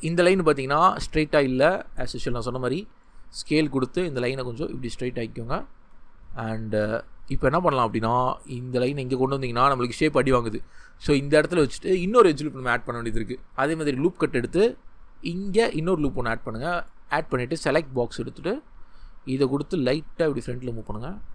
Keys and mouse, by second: 3.1 click, 8.0 g, 11.7 click, 19.2 g, 19.9-21.3 drag.